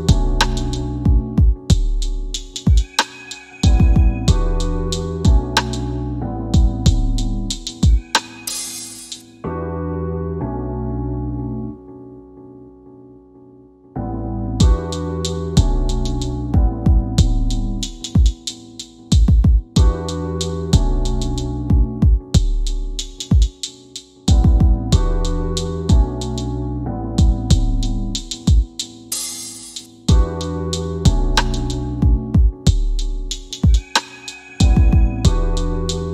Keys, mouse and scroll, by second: 9.9 click, 11.2 scroll up 1, 11.7 scroll down 1, 13.4 click, 14.6 alt+w, 17.0 f, 17.5 w, 19.0 click, 25.7-27.7 typing, 27.9 scroll down 1, 28.6 middle click, 29.7 scroll up 1, 30.6 click, 31.7 click, 32.6 middle click.